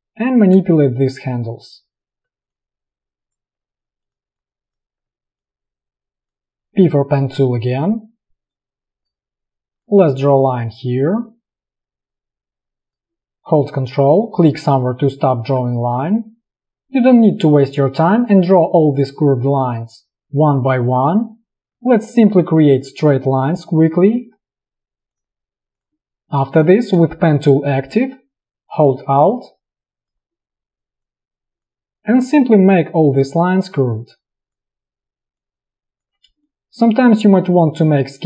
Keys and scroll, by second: 0.7 space, 6.7 p, 36.4 space, 36.5 v.